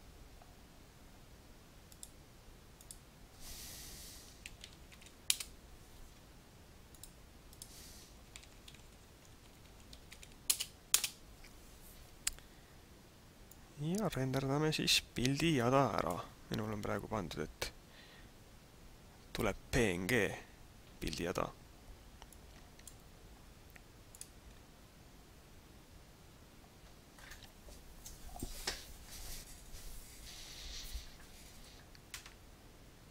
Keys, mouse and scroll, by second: 10.9 Return, 13.4 click, 15.3 click, 22.3 click.